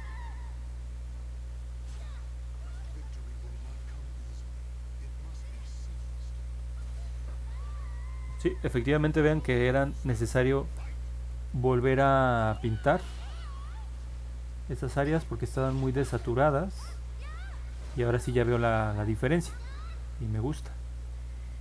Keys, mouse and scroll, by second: 1.8 click, 2.2 click, 2.7 click, 3.0 click, 3.3 click, 4.2 click, 4.9 click, 5.3 click, 5.5 click, 6.9 middle click, 6.9 scroll down 1, 8.5 middle click, 8.5 scroll up 1, 9.6 middle click, 9.9 middle click, 12.9-15.6 drag, 16.2-18.2 drag, 18.7-21.4 drag.